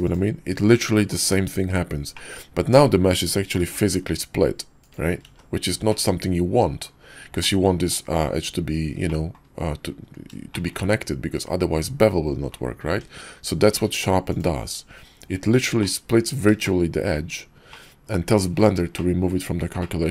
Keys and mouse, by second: 2.1 click, 3.6 g, 5.2 ctrl+z, 5.9-6.9 drag, 7.4 click, 9.1 click, 10.3 shift+middle click, 12.9 Tab, 13.7 q, 15.8-16.5 drag, 16.6-17.1 shift+middle drag, 17.7-18.3 drag, 18.9-19.2 shift+middle drag, 19.8-20.1 middle drag.